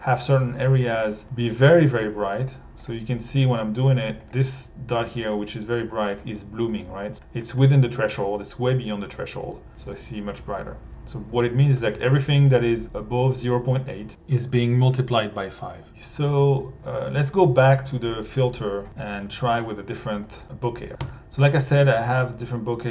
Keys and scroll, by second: 21.0 r.